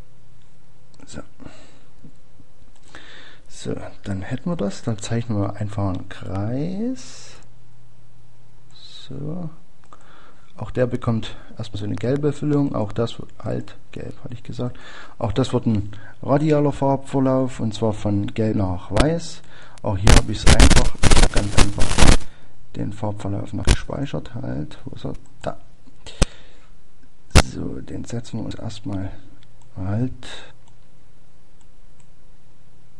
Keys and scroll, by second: 2.3 Up, 5.5 Up, 5.5 Left.